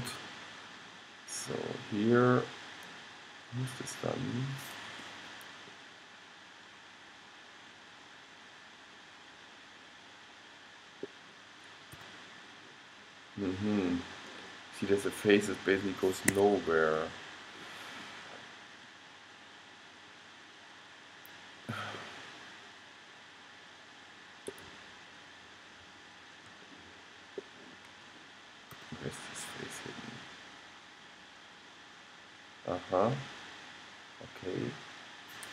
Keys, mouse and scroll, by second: 0.3 g, 0.4 middle click, 5.5-7.7 middle drag, 12.1 g, 18.5-23.9 middle drag, 24.9-26.8 middle drag, 28.9 g.